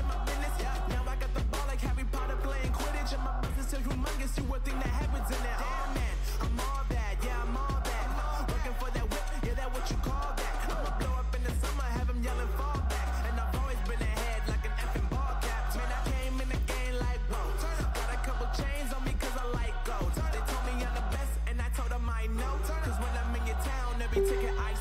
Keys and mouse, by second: 2.0 ctrl+z, 3.4 ctrl+z, 7.4 z, 8.4 z, 8.8 click, 9.3 z, 10.2 ctrl+e, 15.6-16.7 drag, 16.3 right click, 17.6 l, 19.0 z, 20.3 z, 21.7-23.3 drag, 24.4-24.8 right drag.